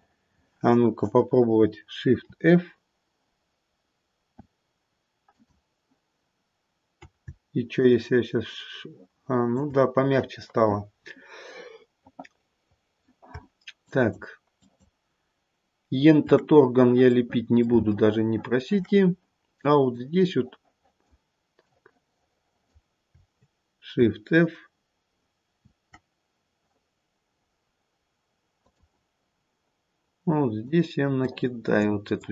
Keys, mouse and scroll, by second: 2.1 shift+f, 7.8 shift+click, 12.0 middle click, 12.0 scroll down 2, 12.1 middle click, 12.3 middle click, 13.8 shift+click, 14.5 shift+click, 16.9 scroll up 2, 17.1 middle click, 18.0 shift+middle click, 19.9 click, 21.6 click, 23.9 shift+f, 30.2 click, 31.1 click.